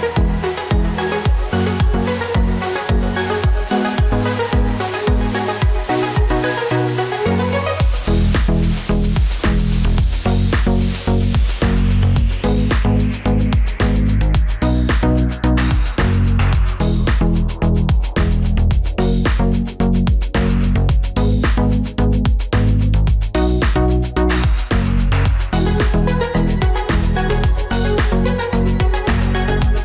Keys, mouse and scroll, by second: 1.4 right click, 14.0 shift+click, 18.8 ctrl+j, 21.2 ctrl+j, 25.0 ctrl+j, 29.0 ctrl+j.